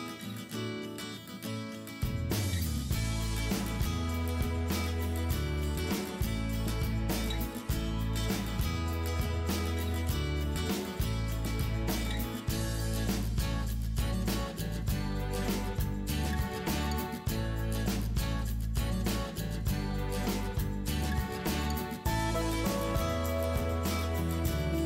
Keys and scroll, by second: 19.7 ctrl+=, 20.1 ctrl+space.